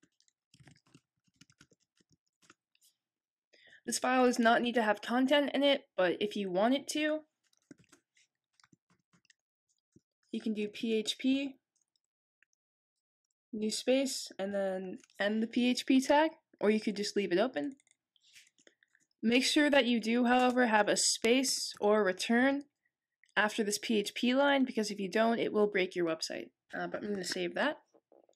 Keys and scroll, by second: 0.0-2.7 typing, 7.7-8.6 typing, 9.8-11.2 typing, 12.5-13.2 typing, 14.5 /, 16.7 /.